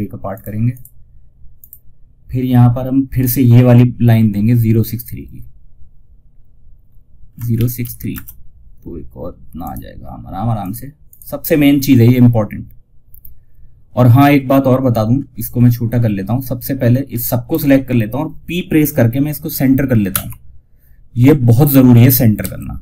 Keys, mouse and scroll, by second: 4.3 click, 8.9 right click, 9.9 click, 14.5-14.8 scroll down 1, 15.7-19.1 drag, 19.4 p, 22.3-22.8 drag.